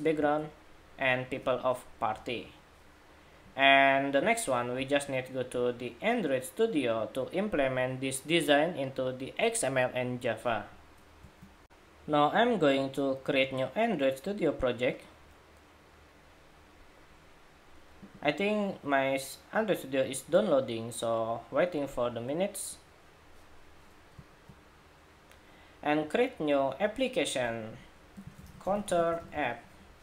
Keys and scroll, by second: 1.8 Escape.